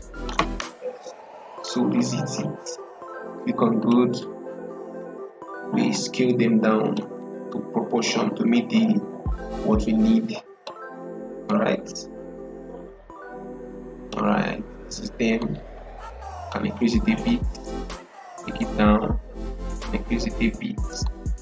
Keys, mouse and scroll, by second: 3.7-20.9 drag, 20.9-21.4 drag.